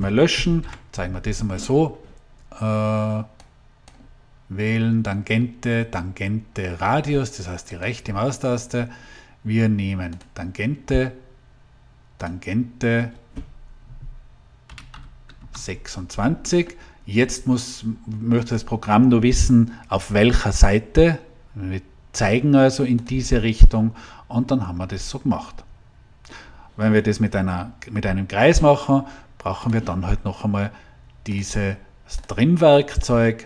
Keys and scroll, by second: 0.5 Delete, 14.8 6, 15.3 Return.